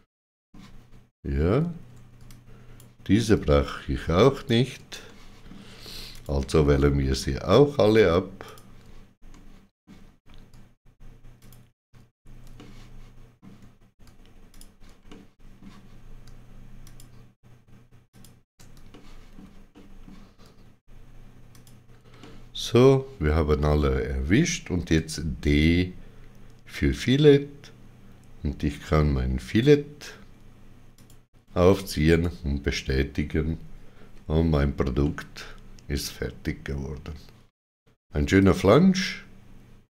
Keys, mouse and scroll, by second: 2.2 ctrl+click, 4.3 ctrl+click, 5.0 shift+middle click, 6.1 ctrl+click, 6.7 shift+middle click, 8.4 ctrl+click, 9.3 middle click, 11.3 ctrl+click, 12.5 shift+middle click, 14.5 ctrl+click, 15.1 shift+middle click, 16.8 ctrl+click, 18.1 ctrl+click, 19.7 shift+middle click, 21.5 ctrl+click, 22.2 middle click, 24.9 d, 30.9 shift+click, 32.0 right click, 34.0 shift+w, 35.0 middle click.